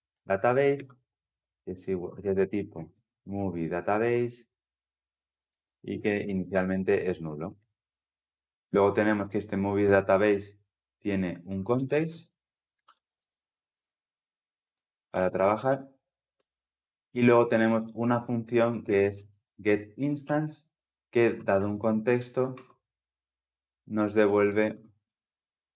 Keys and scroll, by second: 0.0 Return, 6.5 Escape, 7.2 Escape, 7.3 ctrl+alt+l, 7.4 ctrl+alt+o, 16.2 Return, 22.3 Return.